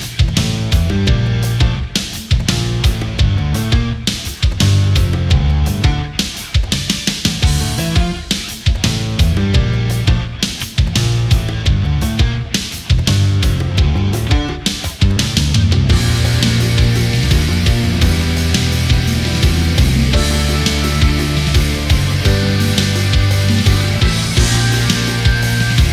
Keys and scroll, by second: 24.4 ctrl+z.